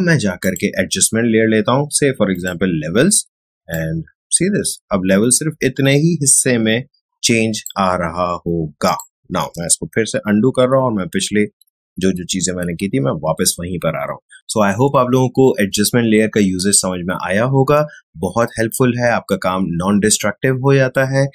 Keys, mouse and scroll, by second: 9.9 ctrl+alt+shift+z.